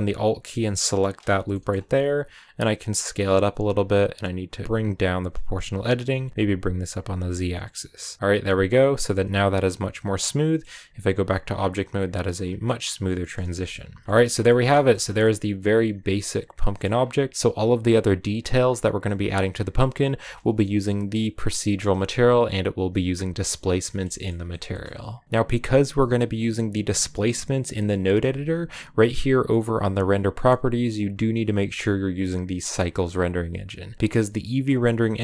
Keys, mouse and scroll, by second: 0.8 alt+right click, 1.4 middle click, 1.7 s, 5.9 g, 9.1 Tab, 9.8-12.2 middle drag, 12.2-12.5 scroll down 4, 12.5-13.6 middle drag, 13.6-14.3 scroll down 7, 13.9 shift+middle click, 14.3 middle click, 14.9 scroll down 1, 15.1-16.8 middle drag, 16.8-17.8 scroll up 4, 23.7 middle click, 24.1-24.5 scroll down 2, 24.5 shift+middle click, 27.7 click, 31.3-34.0 drag.